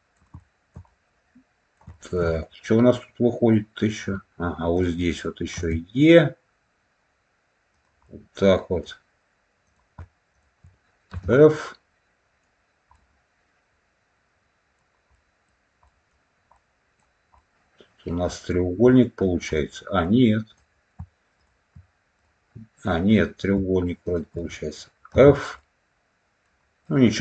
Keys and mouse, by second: 0.3 shift+middle click, 0.8 middle click, 1.8 shift+middle click, 2.2-3.9 middle drag, 4.6 click, 5.5 e, 7.6 click, 7.9 middle click, 11.3-12.3 middle drag, 12.8-14.7 middle drag, 15.0 middle click, 15.8 middle click, 16.4 middle click, 17.3 middle click, 18.8 middle click, 19.4 middle click, 20.4 click, 21.3 shift+click, 22.1 click, 23.0 click, 23.9 shift+click, 25.1 f, 25.5 middle click, 26.7-27.2 middle drag.